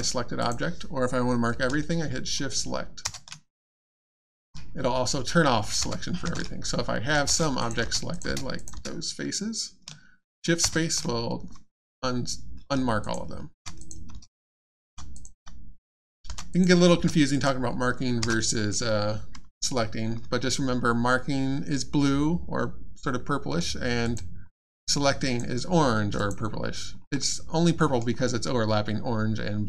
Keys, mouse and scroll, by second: 0.4 click, 3.0 shift+space, 5.8 space, 7.2 shift+space, 7.6 click, 7.6 click, 7.8 space, 8.1 click, 8.2 space, 8.5 click, 8.7 space, 10.6 shift+space, 13.0 click, 13.5-16.9 typing, 13.8 click, 14.6 click, 15.1 click, 15.9 click, 16.5 click, 17.3 click, 18.2 space, 24.0 click, 24.5 middle click, 25.2 click, 27.0-27.6 scroll up 1, 27.6 middle click, 28.0-29.1 scroll down 1.